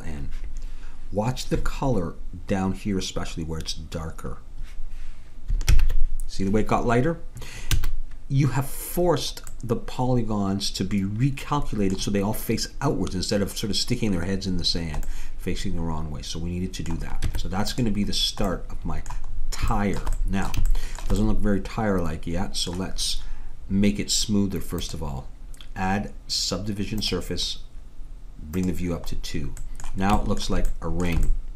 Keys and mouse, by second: 5.8 ctrl+n, 7.8 a, 14.8-16.5 middle drag, 17.3 Tab, 20.8-24.8 middle drag, 24.8-26.6 drag, 28.6-30.4 drag, 30.4 middle click.